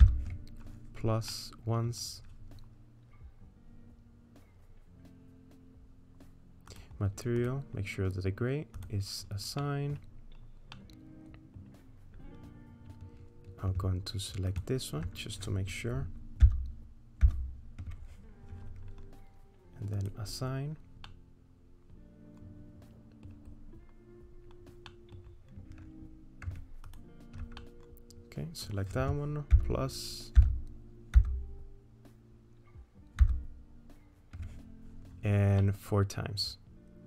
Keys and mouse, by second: 0.0 ctrl+KP_Add, 1.3 middle click, 6.7 click, 7.4 click, 8.8 click, 9.6 middle click, 10.7 middle click, 10.9 click, 10.9 right click, 16.4 ctrl+KP_Add, 17.2 ctrl+KP_Add, 21.1-23.3 middle drag, 24.9 middle click, 27.6-28.7 middle drag, 29.7 ctrl+KP_Add, 30.4 ctrl+KP_Add, 31.2 ctrl+KP_Add, 33.2 ctrl+KP_Add, 35.6-37.0 middle drag.